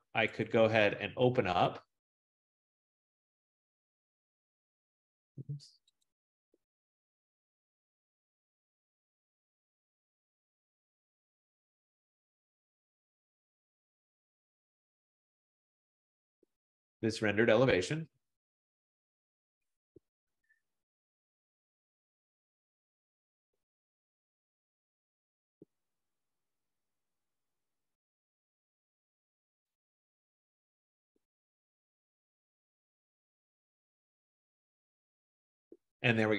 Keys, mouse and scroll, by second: 0.7 click, 6.1 click, 8.5 click, 8.7 click, 10.7 click, 11.0 click, 12.7 click, 12.9 click, 14.1 click, 14.3 click, 15.1 click, 15.4 click, 17.1 click, 17.8 click, 18.0 click.